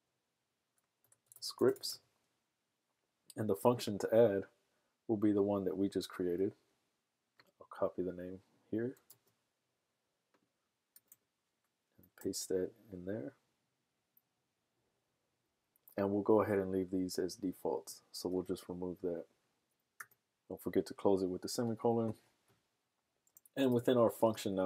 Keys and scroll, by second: 0.0-2.3 typing, 6.3 BackSpace, 9.1 super+c, 12.2 super+v.